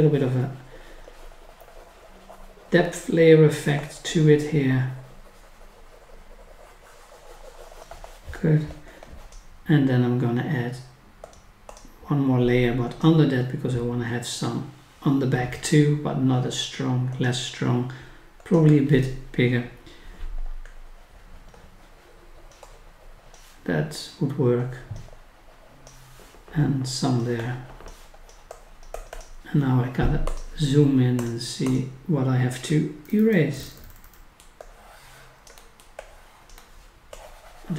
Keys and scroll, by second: 33.1 scroll down 1, 33.7 scroll up 1, 34.5-35.6 scroll up 1.